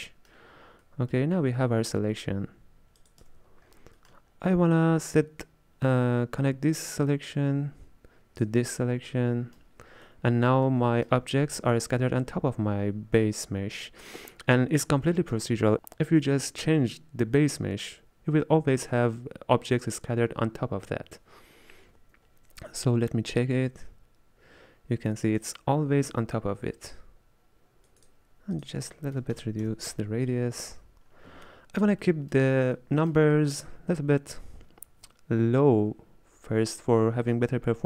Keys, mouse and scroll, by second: 2.0-3.1 scroll down 5, 3.1 click, 3.3 x, 3.7 scroll up 1, 4.0-7.2 middle drag, 7.2 click, 8.9-15.7 middle drag, 23.4-26.5 drag, 28.6-31.5 drag, 31.5-37.8 middle drag.